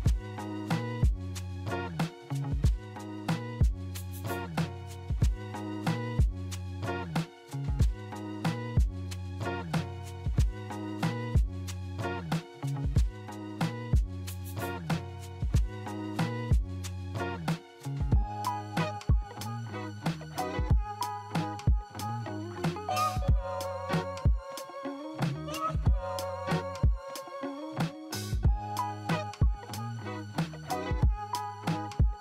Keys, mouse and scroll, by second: 0.1 double click, 1.2 double click, 4.2 double click, 9.5 alt+middle click, 12.5 e, 14.8-15.3 typing, 16.8 alt+middle click, 17.5 t, 17.9 z, 18.5 middle click, 18.5 middle click, 19.0-19.4 scroll down 2, 19.4 w, 23.2-24.7 scroll up 6, 24.7-25.6 scroll up 2, 26.6-27.2 scroll down 10, 27.3 alt+middle click, 28.4 p, 29.6 middle click, 30.2-30.8 scroll up 1, 30.8 middle click, 31.4 middle click.